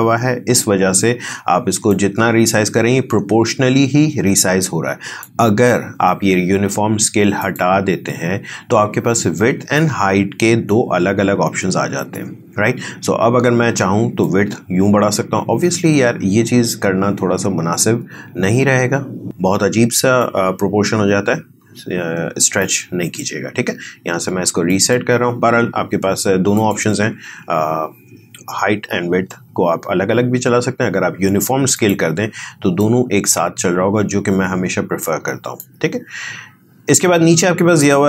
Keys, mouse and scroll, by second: 1.9-6.0 drag, 14.2-19.4 drag, 20.2-29.0 drag, 31.7-38.0 drag.